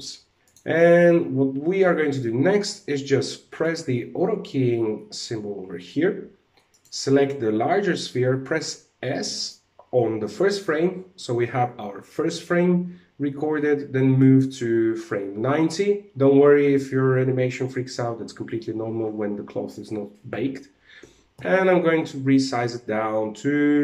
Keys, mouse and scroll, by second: 0.4 middle click, 0.4 click, 3.1 click, 6.2 right click, 8.7 s, 13.8 click, 20.9 s.